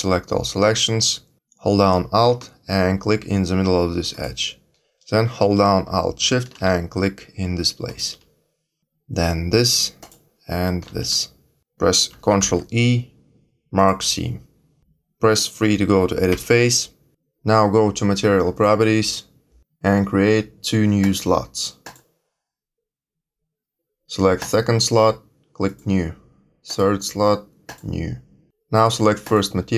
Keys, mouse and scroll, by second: 4.1 alt+click, 7.8 alt+shift+click, 9.9 alt+shift+click, 12.3 ctrl+e, 16.3 3, 18.5 click, 21.0 click, 21.8 click, 24.4 click, 25.6 click, 27.6 click, 29.2 click.